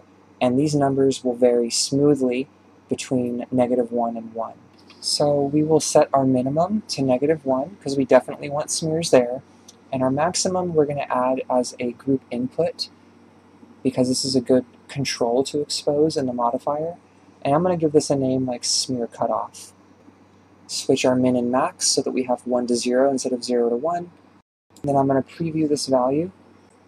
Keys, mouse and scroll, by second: 4.3 d, 4.7-9.3 right drag, 9.3-12.7 drag, 15.6 n, 17.7 click, 17.8-20.0 drag, 20.0 f, 21.0 click, 21.2-22.5 drag, 22.5-23.4 scroll up 1, 23.4-25.0 ctrl+shift+drag, 25.1 shift+space, 26.7 click.